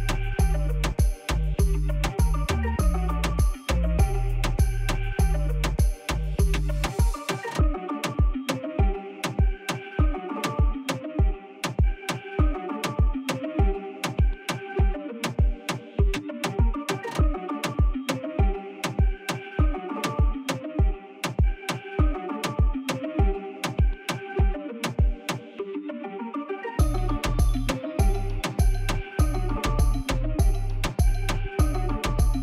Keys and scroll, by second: 1.1 g, 1.3 z, 8.7 shift+d, 8.9 shift+z, 10.7 g, 10.8 z, 12.3 shift+d, 12.4 shift+z, 14.5 shift+d, 14.7 shift+z, 16.2 ., 17.6 g, 17.7 z, 19.2 g, 19.4 shift+z, 20.9 g, 21.1 z, 22.0 shift+d, 22.1 shift+z, 23.8 g, 23.9 z, 25.6 shift+d, 25.7 shift+z, 27.3 shift+d, 27.6 shift+z, 29.4 shift+d, 29.5 shift+z, 31.4 g, 31.5 z.